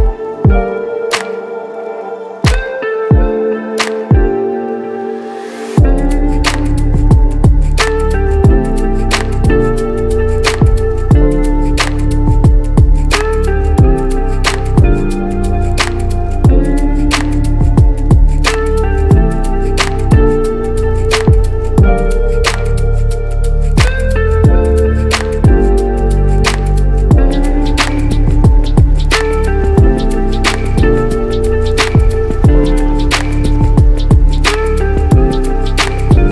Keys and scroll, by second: 35.2 ctrl+alt+z.